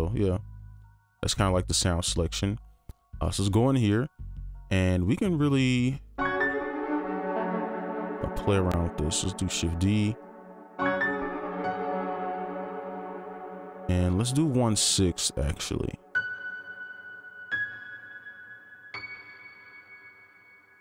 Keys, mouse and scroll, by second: 3.2 right click, 6.1 space, 7.4 space, 8.0 space, 8.2 ctrl+click, 12.0 ctrl+Up, 15.4 right click.